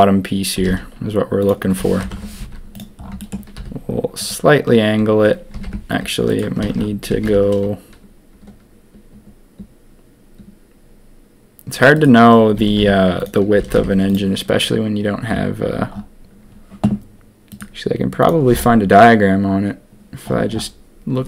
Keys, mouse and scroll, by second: 0.5 g, 1.9 ctrl+KP_3, 2.3 z, 3.2 shift+middle click, 3.5 r, 5.5 s, 6.6 ctrl+z, 7.1 s, 12.5 s, 13.5 s.